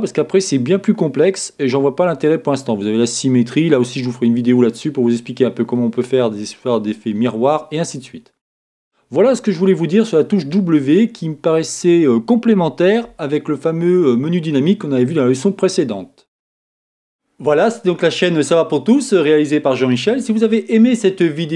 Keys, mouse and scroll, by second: 5.7-7.6 middle drag, 11.1-12.7 middle drag, 12.7 scroll down 1.